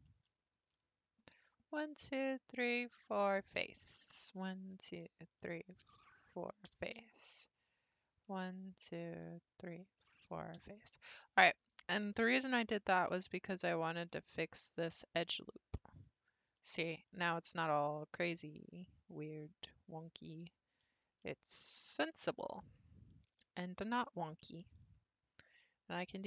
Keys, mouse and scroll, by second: 0.0 1, 0.6 click, 1.3 shift+click, 2.7 shift+click, 3.3 f, 4.2 click, 4.7 shift+click, 5.3 shift+click, 6.2 shift+click, 6.7 f, 7.0-8.0 middle drag, 8.0 click, 8.7 shift+click, 9.5 shift+click, 10.1 shift+click, 10.6 f, 10.9-12.5 middle drag, 12.9 scroll down 1, 13.0-13.5 scroll up 1, 13.5-14.3 scroll down 2, 14.3-14.8 scroll down 1, 14.8 alt+click, 16.1-16.5 scroll down 3, 16.5-18.3 middle drag, 18.3 alt+click, 19.2 alt+click, 20.4 alt+click, 21.0 middle click, 21.6-22.1 scroll down 5, 22.1-24.7 middle drag, 24.7 ctrl+r.